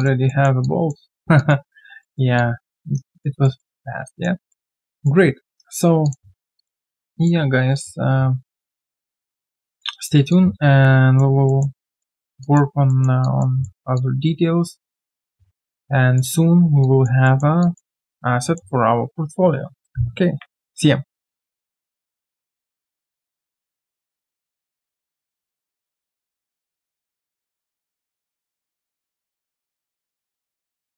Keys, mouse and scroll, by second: 0.2 alt+middle click, 0.6 alt+click, 1.0 alt+scroll down 1, 1.3 alt+click, 1.6 alt+right click, 2.0 alt+middle click, 2.3 alt+click, 3.4 alt+middle click, 3.8 alt+click, 4.5 alt+middle click, 4.9 alt+click, 8.9 alt+right click, 9.1 alt+click, 9.3 alt+middle click, 9.5 alt+click, 10.3 alt+click, 11.4 alt+middle click, 11.7 alt+click, 12.1 alt+right click, 12.4 alt+click, 12.8 alt+middle click, 13.2 alt+click, 13.6 alt+middle click, 13.9 alt+click, 16.8 alt+click, 17.2 alt+middle click, 17.6 alt+click, 18.4 alt+middle click.